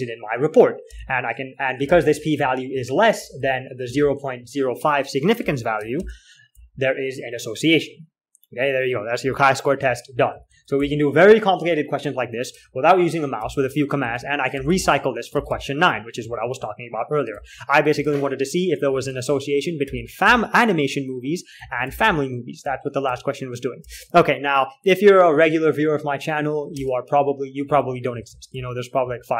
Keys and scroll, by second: 0.0-1.2 typing, 2.4-6.9 typing, 6.3 ctrl+h, 10.3 alt+Tab, 10.4-11.6 typing, 13.1 alt+Tab, 13.8-18.2 typing, 19.4-24.2 typing, 25.4 alt+4, 27.3 alt+Tab, 27.9-29.3 typing.